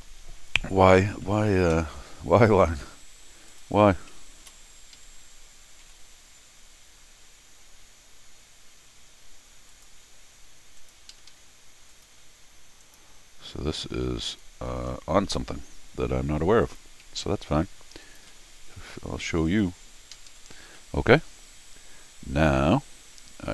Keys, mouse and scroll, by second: 0.6 scroll down 2, 0.9 scroll up 2, 1.2 middle click, 2.0 scroll down 2, 2.2 scroll up 2, 2.9 Escape, 3.5 click, 4.9 Escape, 5.8 l, 9.7 click, 10.8 click, 11.1 Escape, 11.3 Escape, 11.9 click, 12.8 click, 14.3 click, 16.6 click, 18.0 ctrl+click, 19.5 click, 20.1 Escape, 20.3 Escape, 20.7 scroll down 2, 21.1 r, 21.6 middle click, 21.6 scroll down 2, 22.7 middle click, 22.7 scroll down 2.